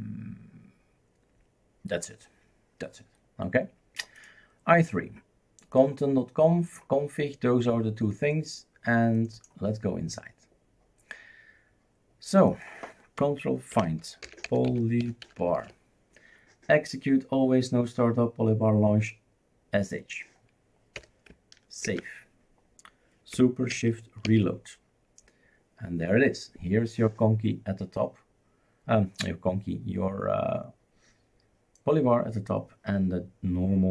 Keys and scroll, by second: 13.9 ctrl+f, 14.0-16.1 typing, 21.0 BackSpace, 21.9 ctrl+s.